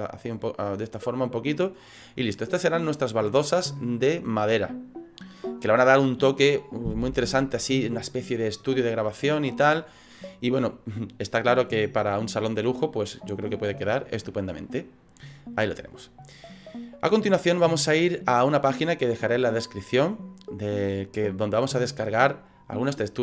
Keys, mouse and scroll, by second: 0.4 middle click, 2.9 scroll down 4, 3.3 middle click, 4.8 middle click, 12.8 click, 13.7 middle click, 17.6 middle click, 20.9 middle click.